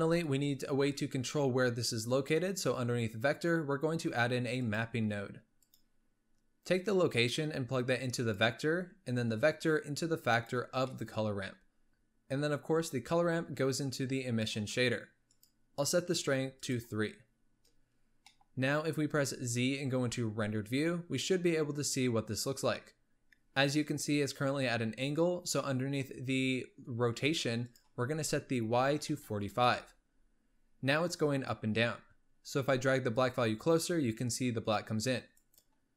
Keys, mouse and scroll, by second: 6.7 click, 9.3-11.0 drag, 11.0 middle click, 11.6-11.9 scroll up 1, 11.9 click, 13.0 click, 15.4-16.8 drag, 17.5-18.0 scroll up 1, 18.0-18.3 scroll up 1, 18.3 middle click, 18.9 z, 21.7-24.6 scroll down 1, 25.7-27.8 middle drag, 27.8-30.8 drag, 32.8-35.6 drag.